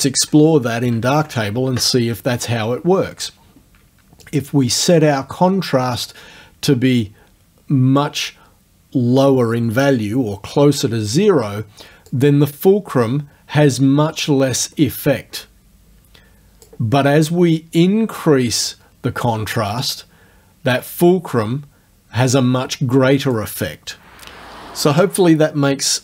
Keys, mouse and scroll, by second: 1.1 alt+Tab, 4.3 click, 12.1-16.9 drag, 17.3-19.4 drag, 19.9-23.5 drag.